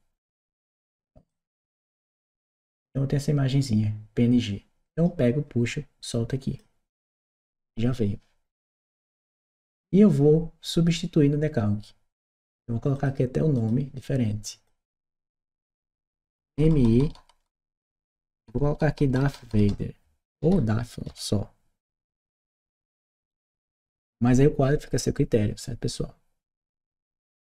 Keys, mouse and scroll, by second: 1.1-2.0 drag, 4.7 click, 8.9 click, 12.7 click, 13.3 click, 14.4 click, 15.5 BackSpace, 20.2 shift+d, 20.9 d, 22.5 t, 23.7 Return.